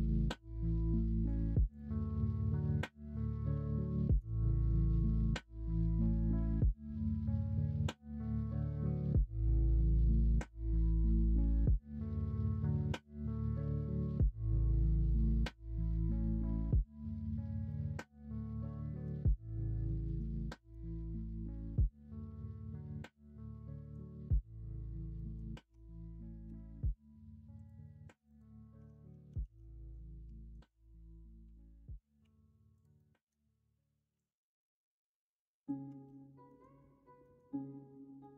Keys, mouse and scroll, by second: 2.4-4.2 middle drag, 4.4 shift+middle click, 4.9-12.5 middle drag, 17.7-19.3 middle drag, 20.0 Tab, 20.7-23.9 middle drag, 25.1 middle drag, 26.4 /, 28.7 Tab, 29.4 alt+z, 32.2 3, 32.9 middle click, 36.0 alt+z, 36.4 middle click, 37.2 scroll up 1, 37.3 middle click, 38.2 scroll up 1.